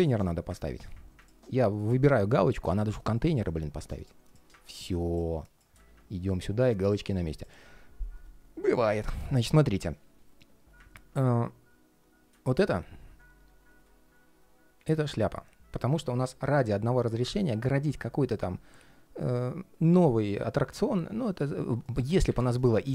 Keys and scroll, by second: 0.3 super+z.